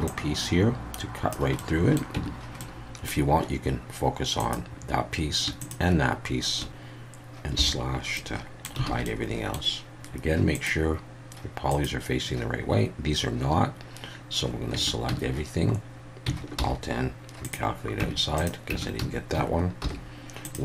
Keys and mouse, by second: 0.1-1.3 drag, 1.7 middle click, 2.2 Tab, 2.6-3.1 middle drag, 4.4 click, 7.6 /, 8.2-8.7 middle drag, 8.9 alt+a, 9.1-9.5 middle drag, 10.7-12.7 drag, 14.7 Tab, 15.1 a, 16.6 alt+n, 18.0 Tab, 18.4-18.7 drag, 18.7 Tab, 19.0 a, 19.8 alt+n.